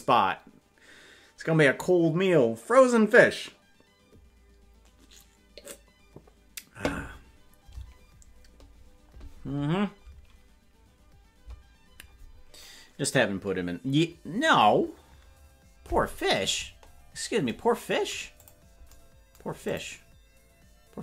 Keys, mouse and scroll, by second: 16.6-17.4 scroll down 1, 17.4-18.4 scroll down 1, 18.4 click, 19.7 click.